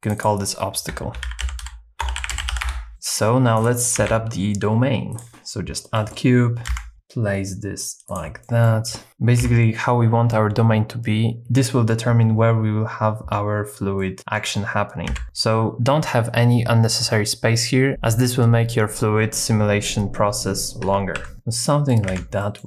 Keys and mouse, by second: 0.2-2.7 drag, 2.9 Tab, 3.1 middle click, 3.6 click, 4.0 shift+a, 5.9 middle click, 6.7 KP_1, 6.9 g, 6.9 z, 8.1 shift+click, 8.4 middle click, 9.1 middle click, 9.4 KP_7, 14.0 middle click, 15.1 KP_3, 20.8 Tab, 21.2 1, 21.3 s, 21.3 x, 21.6 middle click, 22.2 alt+z, 22.4 middle click.